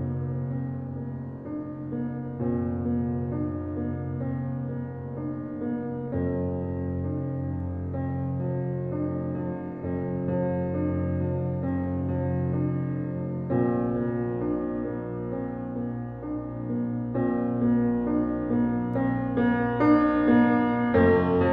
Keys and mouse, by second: 3.6 click, 7.3 drag, 8.2 click, 9.4 ctrl+z, 12.1 click, 15.4 click, 15.6-17.5 drag, 17.8 ctrl+z, 19.0 click.